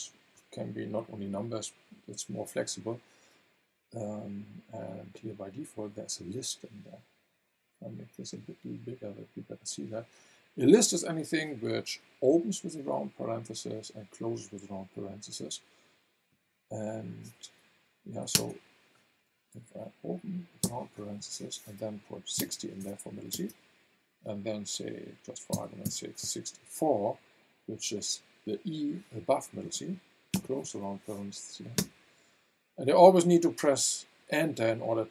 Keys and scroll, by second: 18.3 BackSpace, 20.6 shift+9, 22.3 KP_6, 22.4 KP_0, 23.3 space, 25.5 KP_6, 25.8 KP_4, 30.3 shift+0, 31.8 Return.